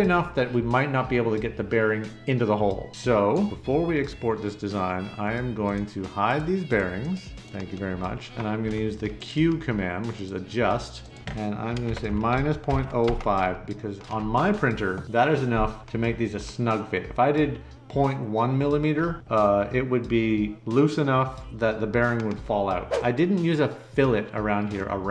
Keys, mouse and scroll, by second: 7.8 middle click, 11.6-13.5 typing.